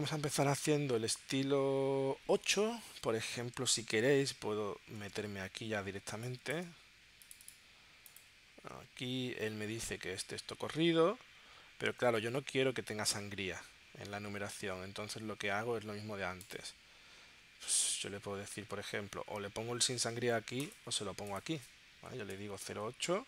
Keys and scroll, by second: 3.9 super+Tab, 5.0 super+Tab, 6.1 space, 12.2 super+Tab, 22.3 0.